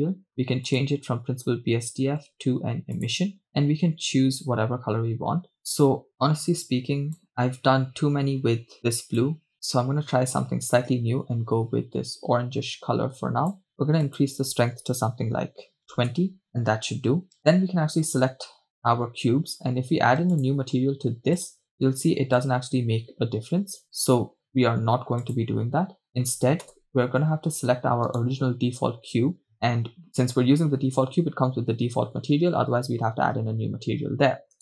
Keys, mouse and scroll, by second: 0.7-4.0 drag, 14.1-16.2 drag, 17.4 right click, 20.4 click, 21.4 click, 25.2 click, 26.8 KP_0, 28.6 right click.